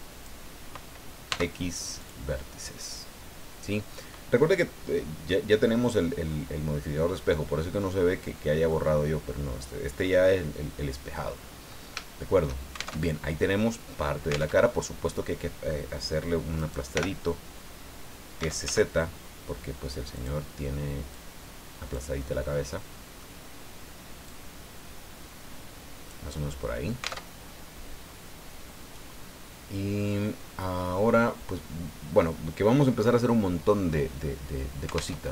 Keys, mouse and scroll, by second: 1.3 x, 2.0 click, 5.3-8.9 middle drag, 11.5 scroll up 2, 12.0 shift+click, 12.9 alt+shift+Tab, 14.5 alt+Tab, 16.6 right click, 16.9 l, 18.4 s, 18.6 z, 20.1 right click, 21.1-22.1 right drag, 22.2-23.3 middle drag, 24.2-26.3 drag, 26.3 middle click, 27.0 alt+click, 27.2 alt+Tab, 35.1 alt+Tab.